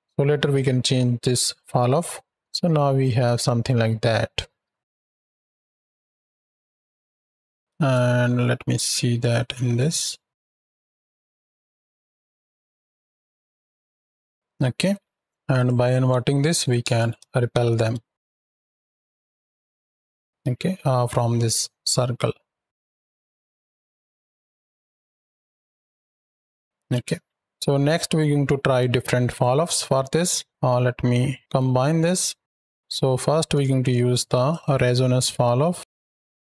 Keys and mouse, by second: 2.3-4.5 drag, 4.5 ctrl+z, 5.0 space, 6.8 shift+middle drag, 7.6 space, 7.9 z, 8.7 z, 9.3-9.7 middle drag, 10.0 shift+middle drag, 10.7 space, 11.6 middle click, 12.5-14.7 typing, 15.4-16.7 drag, 17.3 shift+Right, 17.4 shift+Left, 17.8 space, 19.2 ctrl+space, 20.3 z, 22.0 click, 26.5 space, 27.2 shift+Right, 27.3 shift+Left, 28.6-29.2 drag, 29.5-30.4 drag, 31.4 g, 32.5 ctrl+click, 33.5 shift+a.